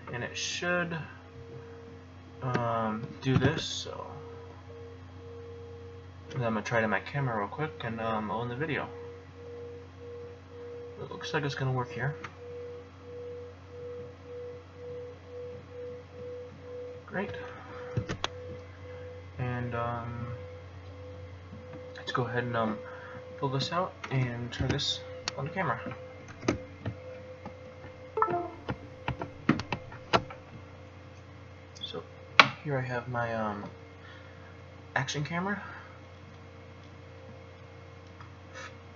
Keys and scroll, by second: 3.3 alt+y, 17.9 alt+o, 24.6 F7, 26.4 Return.